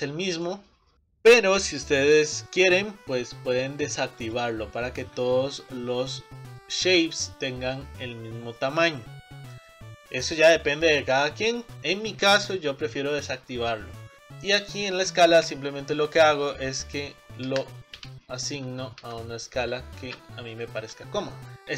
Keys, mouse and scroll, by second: 0.9-2.6 middle drag, 2.6-4.4 drag, 5.6-13.3 middle drag, 14.1 BackSpace, 21.4 click.